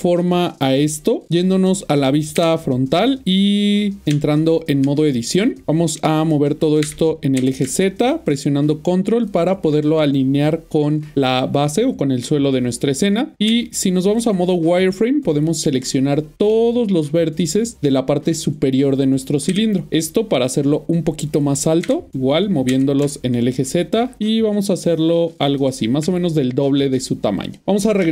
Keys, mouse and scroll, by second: 4.2 Tab, 4.7 Tab, 5.6 1, 6.9-7.7 typing, 9.3 ctrl+click, 14.0 typing, 15.0 click, 16.5 middle click, 20.2 typing, 20.2-21.8 scroll down 1, 21.8-22.7 typing, 25.6 ctrl+click, 27.6-28.1 Tab.